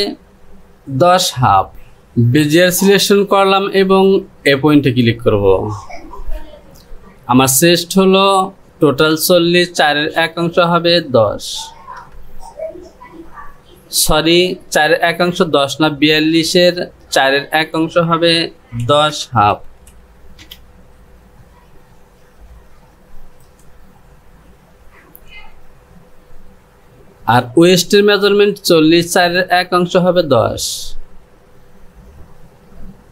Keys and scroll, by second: 1.7 F6, 11.9 KP_1, 19.0 KP_1.